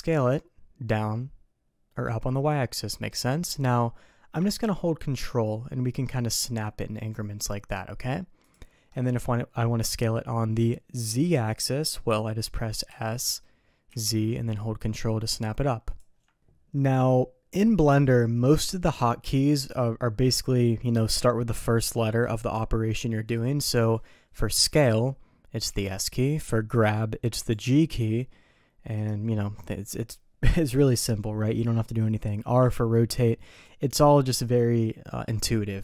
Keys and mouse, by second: 9.0-10.1 middle drag, 12.9 s, 24.6 middle click, 25.7 s, 27.5 g, 32.6 r.